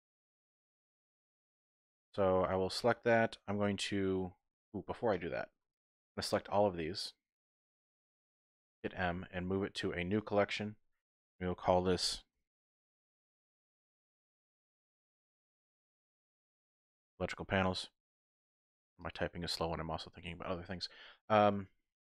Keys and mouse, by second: 1.3 typing, 5.7 shift+click, 6.2 shift+click, 7.0 shift+click, 8.8 m.